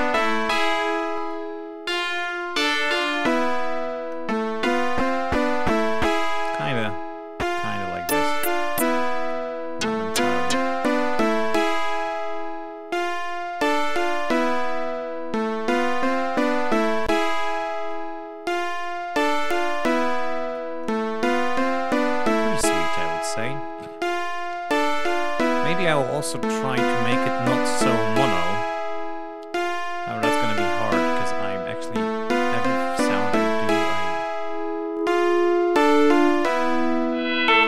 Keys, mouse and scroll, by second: 0.9 click, 2.1 click, 2.8-4.2 drag, 4.6 click, 7.6-9.4 drag, 10.1-11.7 drag, 12.0-14.0 drag, 15.3-17.1 drag, 17.3 click, 19.1 click, 20.1 click, 20.7-21.9 drag, 23.1 click, 26.0 click, 26.4 click, 34.2-36.8 drag, 36.9-37.6 drag.